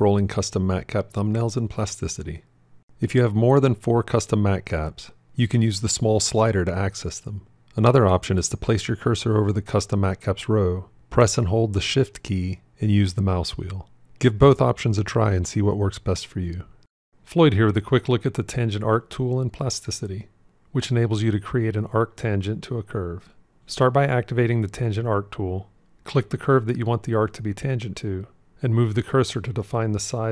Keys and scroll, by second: 10.6-15.1 shift+scroll.